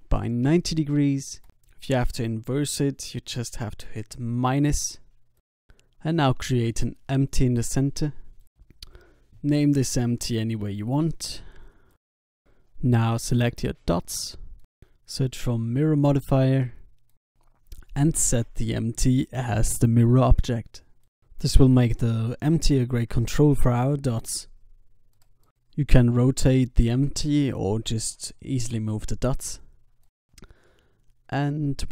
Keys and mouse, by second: 3.6 Tab, 5.0 shift+a, 8.9-11.9 drag, 12.4 r, 12.8-14.6 drag, 14.4 right click, 18.1-22.3 drag, 20.7 g, 23.7-25.6 drag, 24.6 r, 27.9-29.7 drag, 28.3 g, 30.8-31.8 drag, 31.4 g.